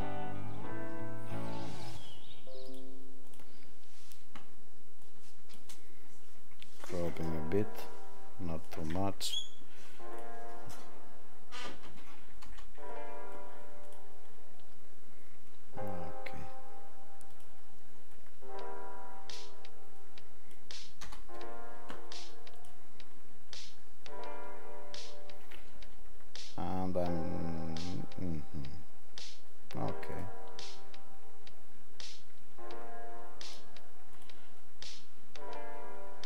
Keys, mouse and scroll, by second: 10.2 click, 13.9 click, 30.1 click.